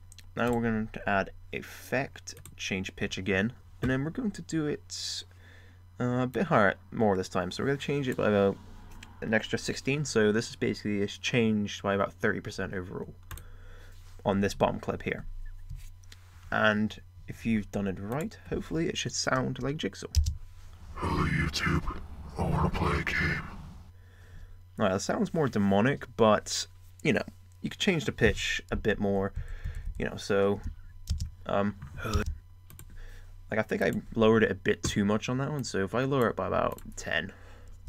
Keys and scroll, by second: 20.1 space.